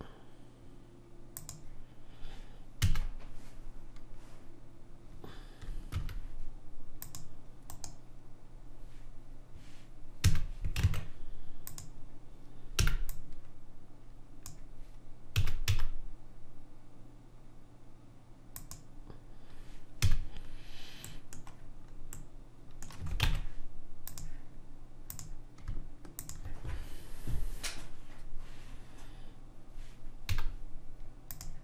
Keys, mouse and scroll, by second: 2.9 a, 6.0 ctrl+r, 10.3 a, 10.9 ctrl+Tab, 12.9 b, 15.4 s, 20.1 a, 21.2-22.3 middle drag, 23.5 ctrl+Tab, 25.2 click, 30.4 z.